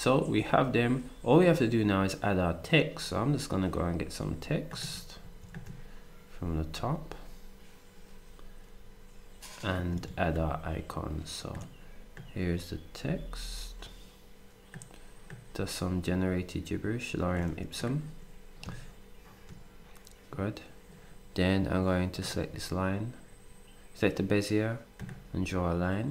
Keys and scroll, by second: 5.2 ctrl+d.